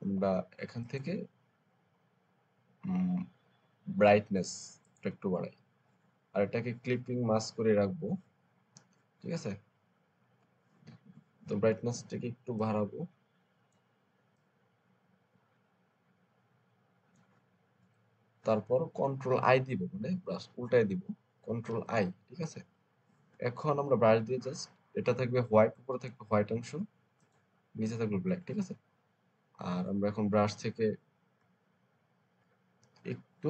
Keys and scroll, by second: 21.6 ctrl+i, 30.4 b.